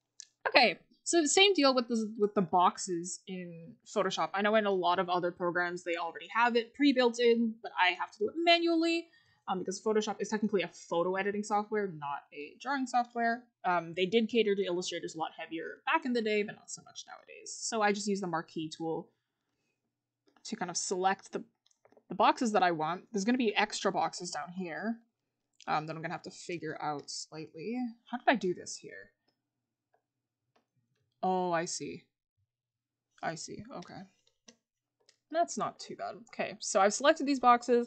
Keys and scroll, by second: 22.9 scroll up 1, 36.3 scroll up 1.